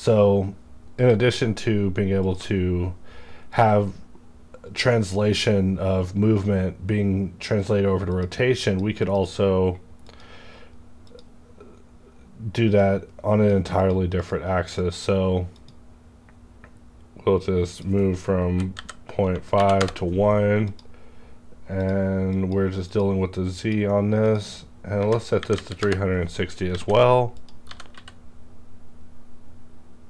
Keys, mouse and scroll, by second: 1.0 click, 1.2 right click, 2.2 click, 8.1-14.1 drag, 14.8 click, 17.7 click, 18.4 KP_Decimal, 18.7 KP_5, 19.3 Tab, 19.6 KP_1, 19.8 KP_Enter, 20.6 click, 21.1 scroll down 1, 21.7 click, 22.3 click, 24.9 KP_3, 25.0 click, 25.3 KP_6, 25.6 KP_0, 25.8 KP_Enter, 26.7 alt+a, 27.3 click, 27.4 click, 27.6 g, 28.0 z.